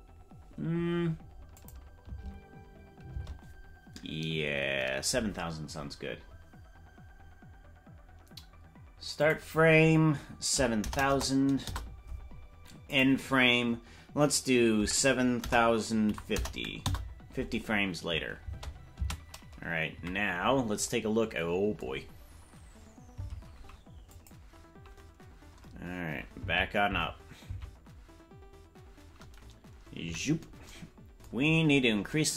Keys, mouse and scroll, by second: 1.6 click, 3.2 space, 9.2-12.2 drag, 10.9 KP_0, 11.1 KP_0, 12.9-17.4 drag, 19.0 space, 19.9 KP_Decimal, 23.3 Left, 24.1 click, 26.5 Left, 27.0 Left, 28.1 Left, 30.0 KP_Decimal, 31.4-32.1 scroll down 9.